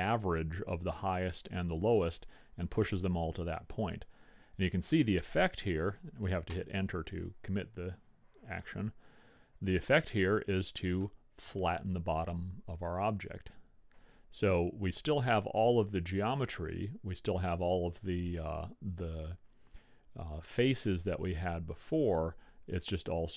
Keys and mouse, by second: 11.7-13.3 middle drag, 22.3-23.3 middle drag.